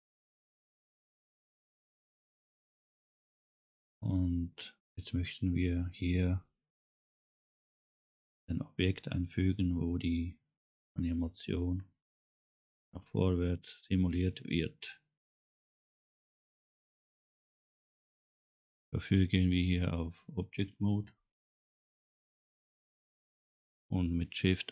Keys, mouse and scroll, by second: 20.6 click, 22.6 click, 23.2-23.6 scroll up 2.